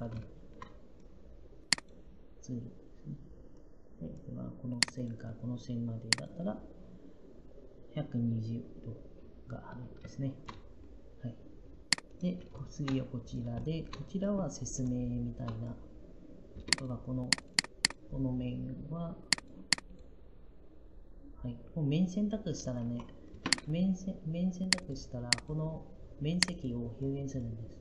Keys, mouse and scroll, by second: 16.4 Up, 22.7 Escape.